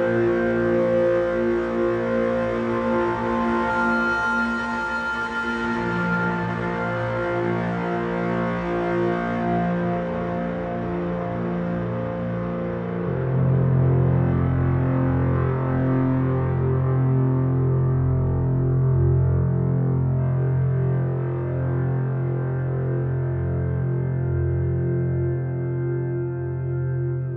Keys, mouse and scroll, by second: 2.1-5.1 drag, 6.5 shift+z, 17.4-18.8 drag, 24.2-26.0 middle drag, 26.8-27.3 middle drag.